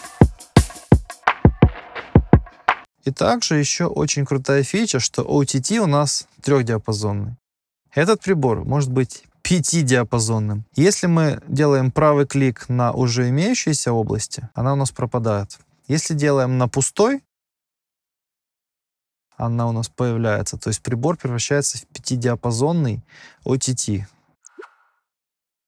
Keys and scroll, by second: 2.8 space.